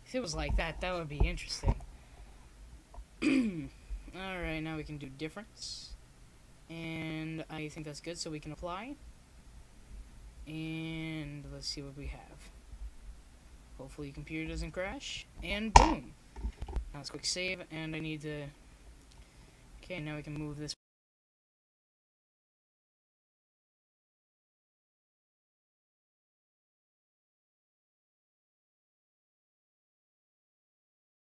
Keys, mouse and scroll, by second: 0.8 KP_7, 3.1-5.4 drag, 6.4-8.0 drag, 7.8 z, 8.1 click, 8.5 middle click, 9.1-10.8 drag, 11.5 KP_0, 12.7 z, 13.5-15.0 drag, 15.8-18.0 middle drag, 16.2 s, 19.5-21.4 drag.